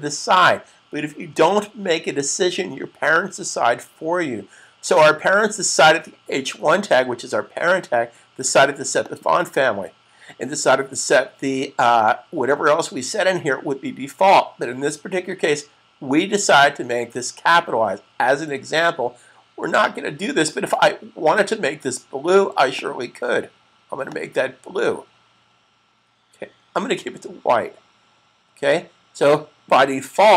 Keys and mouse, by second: 8.8 click, 21.2 click, 29.1 click.